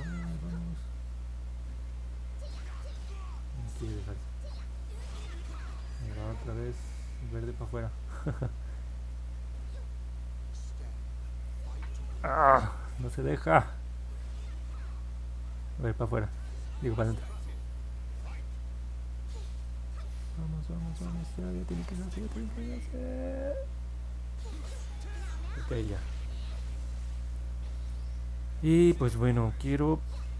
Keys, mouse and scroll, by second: 0.1 click, 0.9 click, 1.5 click, 2.0 click, 2.6 click, 3.5 click, 4.1 click, 4.7 click, 5.2 click, 6.0 click, 6.5 click, 7.1 click, 7.5 click, 8.1 click, 8.5 click, 9.0 click, 9.4 click, 10.0 click, 10.7 click, 13.8 click, 14.3 click, 14.8 click, 15.4 click, 16.0 click, 16.5 click, 17.3 click, 17.8 click, 18.6 click, 18.9 click, 19.4 click, 19.9 click, 20.5 click, 21.1 click, 21.9 click, 22.5 click, 23.0 click, 23.5 click, 24.0 click, 26.2 middle click, 26.2-26.7 scroll down 2, 26.7 scroll up 1, 26.9 scroll down 1, 27.3 scroll up 1, 28.1 middle click, 28.5 middle click.